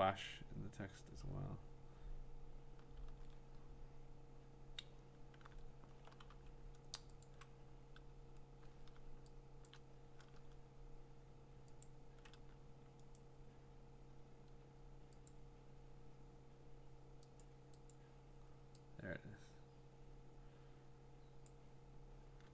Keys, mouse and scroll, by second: 2.9 click, 3.1 ctrl+z, 3.8 middle click, 5.3-6.0 scroll, 6.3 v, 7.2-9.7 ctrl+click, 9.7 click, 9.8 click, 11.8-12.8 ctrl+click, 12.7 ctrl+click, 13.2 right click, 15.3 click, 16.3 click, 17.4 click, 17.9 click, 21.4 click.